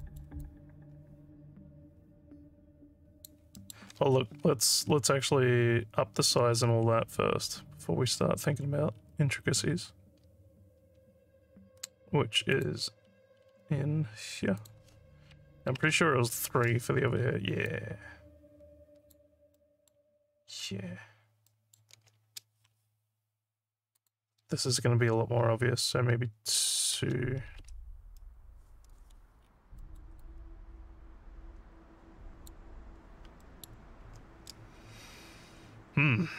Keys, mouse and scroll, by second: 0.1 alt+middle click, 0.4-3.3 alt+drag, 3.6 alt+middle click, 4.4 scroll down 2, 8.1-9.1 scroll down 5, 9.6 scroll down 2, 13.0-13.4 scroll up 2, 14.6 click, 17.2 alt+scroll up 1, 17.7-19.1 alt+drag, 19.6 alt+middle click, 21.5 alt+middle click, 24.0 click, 29.4 alt+scroll up 3, 29.8 alt+middle click, 30.2-32.5 alt+drag, 33.4 alt+middle click.